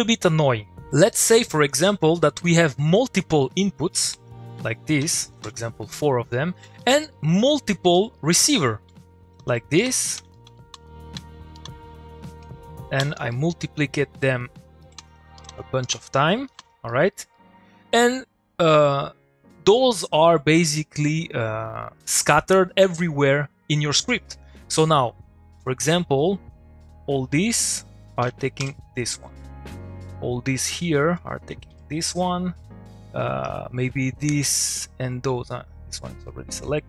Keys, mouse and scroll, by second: 3.2 click, 4.4 click, 4.8 ctrl+v, 5.3 click, 5.4 ctrl+v, 6.3 middle click, 6.8 click, 7.1 middle click, 8.0 click, 8.1 middle click, 8.8 ctrl+c, 9.2 click, 9.8 ctrl+click, 9.8 ctrl+v, 10.0 ctrl+click, 10.2 ctrl+v, 10.3 ctrl+click, 10.4 ctrl+v, 10.6 ctrl+click, 10.7 ctrl+v, 10.8 ctrl+click, 11.2 ctrl+v, 11.6 ctrl+click, 11.6 ctrl+v, 11.8 ctrl+click, 13.0 ctrl+c, 13.1 ctrl+middle click, 14.2-15.1 click, 15.4 click, 15.8 click, 16.4 click, 16.8 middle click, 17.2 click, 17.3 middle click, 25.6 click, 28.6 u, 29.2 click, 31.7 u, 33.4-34.4 drag.